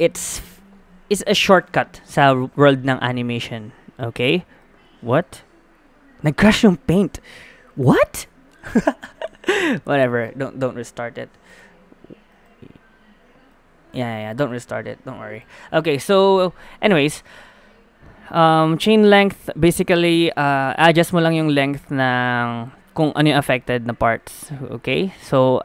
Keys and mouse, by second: 15.4 click, 16.3-18.6 middle drag, 18.9-22.9 drag, 22.9 middle click, 24.2-25.6 drag.